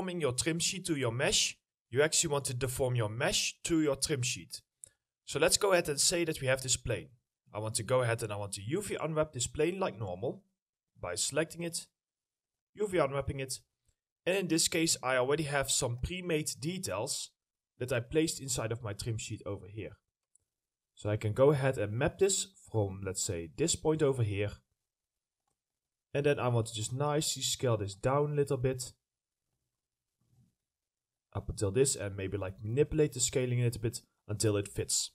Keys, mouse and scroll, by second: 11.6 middle click, 16.2 middle click, 16.5-17.0 scroll up 1, 18.5 middle click, 21.6-21.9 scroll up 1, 21.9 middle click, 23.8-24.4 scroll down 1, 24.5 middle click, 26.1-26.8 scroll up 1, 27.1 ctrl+click, 28.1 ctrl+middle click, 28.1 click, 28.5-28.8 scroll up 1, 29.5 ctrl+click, 31.1 middle click.